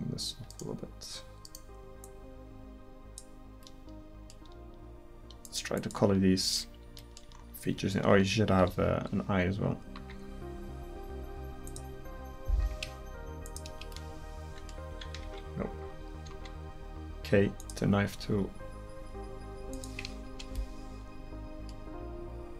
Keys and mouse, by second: 2.0-3.2 drag, 5.8 click, 6.4 middle click, 10.0 k, 15.3 ctrl+z, 16.4 k, 20.8 middle click.